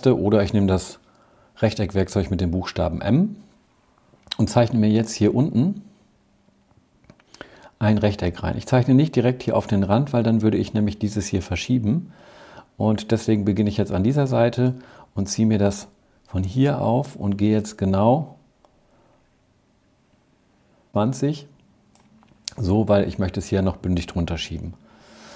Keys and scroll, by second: 2.8 m, 24.2 v.